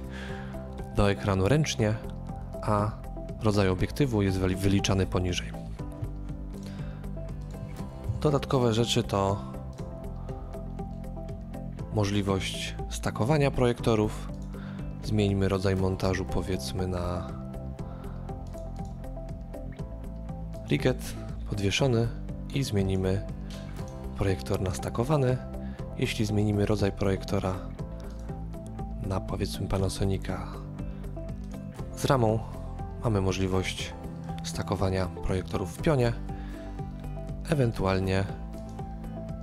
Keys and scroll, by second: 8.1 KP_3.